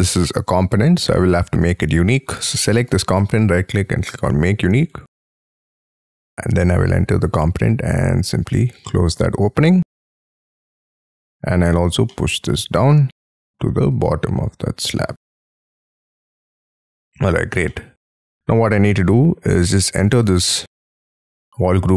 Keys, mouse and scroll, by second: 0.4 Escape, 1.0 middle click, 1.8 scroll down 6, 2.8 right click, 4.9 double click, 5.7-7.0 scroll up 28, 7.0 p, 8.9 middle click, 9.2-9.8 scroll down 13, 10.0 middle click, 12.1 middle click, 12.7-13.2 scroll up 11, 14.1-14.5 scroll down 11, 14.7-15.1 scroll up 10, 15.3 middle click, 15.7 space, 15.9 Escape, 16.5 middle click, 17.7 middle click, 18.1 scroll down 3, 18.5 scroll up 5, 19.7 double click, 20.2 double click, 21.5 double click.